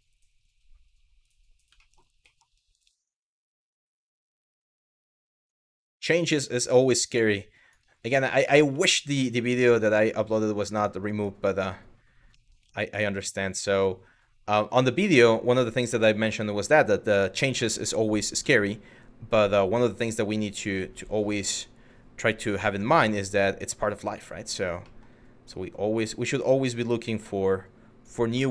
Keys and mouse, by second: 1.5 shift+middle click, 2.0 middle click, 3.3 click, 4.5 click, 5.4 shift+middle click, 6.6 click, 8.0 shift+middle click, 8.4 Tab, 9.3 shift+middle click, 11.9 middle drag, 12.3 ctrl+z, 12.8 middle drag, 17.0 Tab, 18.2 middle click, 20.3 click, 21.9 click, 23.1 click, 24.4 middle click, 26.6 click, 28.0 shift+middle click.